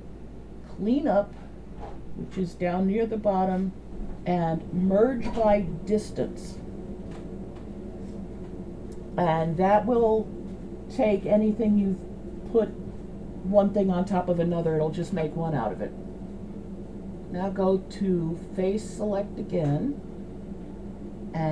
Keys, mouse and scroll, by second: 17.9 click.